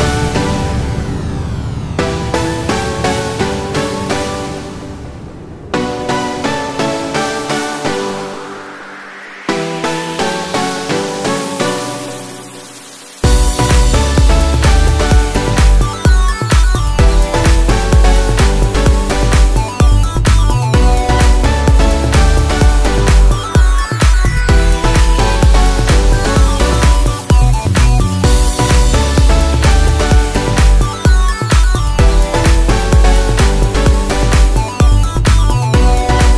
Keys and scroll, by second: 11.5 ctrl+t, 17.0 ctrl+t.